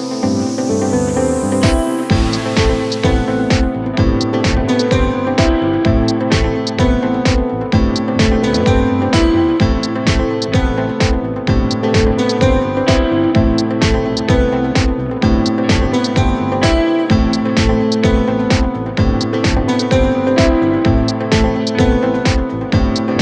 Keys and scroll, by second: 1.3 ctrl+z, 4.4 f.